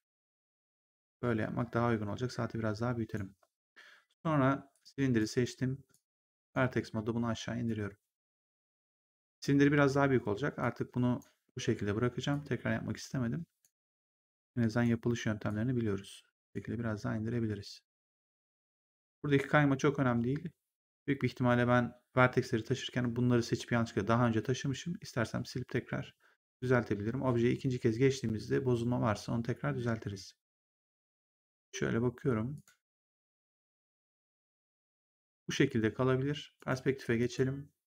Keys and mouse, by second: 4.6 click, 5.1 right click, 5.8 click, 6.6 w, 7.6 click, 10.5 click, 12.2 click, 13.9 click, 15.4 click, 18.7 right click, 26.3 right click, 32.4 click, 36.5 right click, 37.1 click.